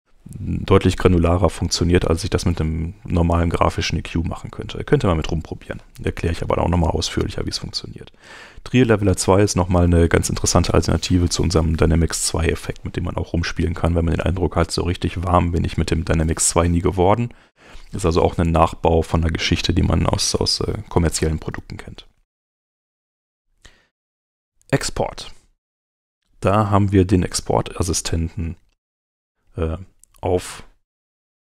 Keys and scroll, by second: 27.5 super+Tab.